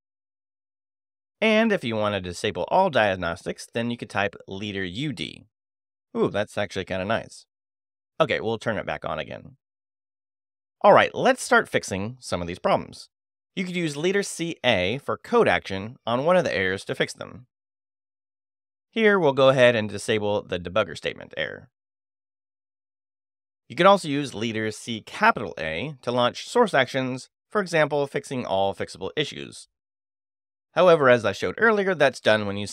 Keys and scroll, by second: 1.1 shift+;, 1.5 shift+q, 1.8 Return, 3.5 space, 3.7 u, 5.2 d, 10.2 super+space, 10.4 u, 10.6 d, 13.1 j, 15.7 space, 16.5 shift+c, 18.1 a, 22.2 ctrl+n, 22.9 Return, 24.2 space, 24.4 c, 24.8 shift+a, 27.1 5, 29.7 Return, 31.4 j.